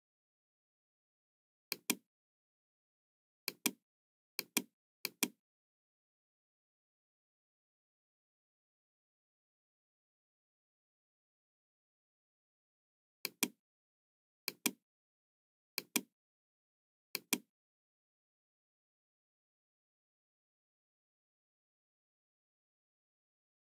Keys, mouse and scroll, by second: 1.7 click, 3.4 click, 4.3 click, 5.0 click, 13.2 click, 14.4 click, 15.6 click, 17.1 click.